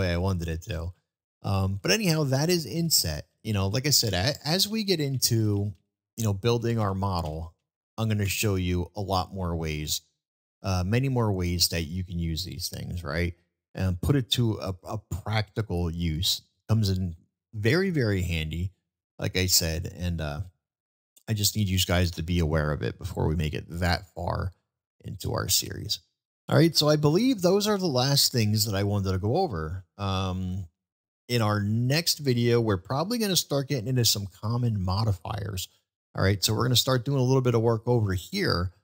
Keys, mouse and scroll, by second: 2.0 ctrl+z, 4.5-8.6 ctrl+z, 9.8-10.1 middle drag, 11.3 middle drag, 12.5 middle drag, 15.0-15.3 shift+middle drag, 16.0 shift+middle drag, 16.9-17.9 middle drag, 18.8-20.5 middle drag, 20.9-22.0 middle drag, 24.6-25.8 middle drag.